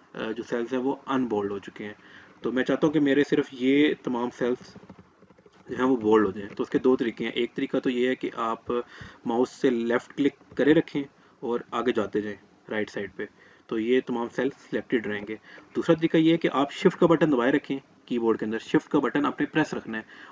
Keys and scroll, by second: 16.4 shift+Right.